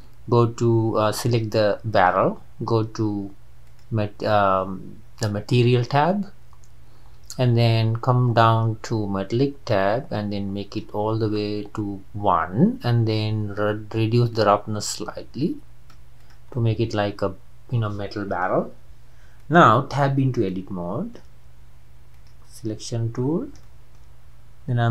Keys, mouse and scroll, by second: 1.3 click, 2.1 click, 3.7 click, 9.9-16.3 drag, 16.6-19.6 middle drag, 19.6 click, 19.9 Tab, 20.6-22.2 shift+middle drag, 22.2 click, 23.2 scroll up 2, 23.7-24.9 shift+middle drag.